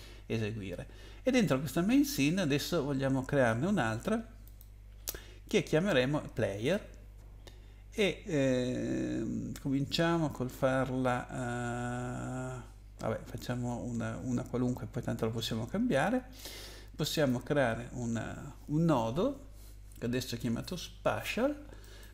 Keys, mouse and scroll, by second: 4.4 click, 17.1 click, 21.8 right click.